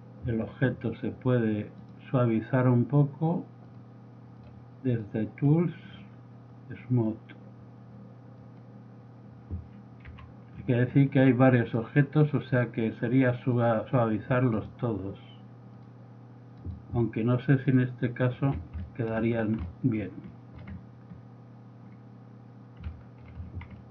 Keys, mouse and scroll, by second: 0.0 click, 1.2-1.9 middle drag, 1.9 right click, 10.3 z, 10.5-11.3 middle drag, 13.8 click, 14.7-15.1 right drag, 18.6 z, 18.9-19.7 middle drag, 20.0-20.5 middle drag, 21.3 middle click, 23.1-23.9 middle drag.